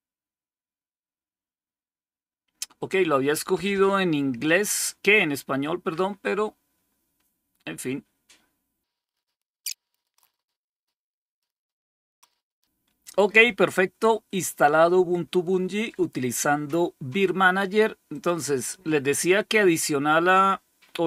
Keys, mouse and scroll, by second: 4.3 click, 5.2 click, 8.9-9.2 scroll down 1, 9.2 click, 9.9 click, 10.0-10.7 typing, 10.5 click, 10.8 click, 11.5 click, 12.3 click, 12.5 click, 18.0 click, 18.7 click.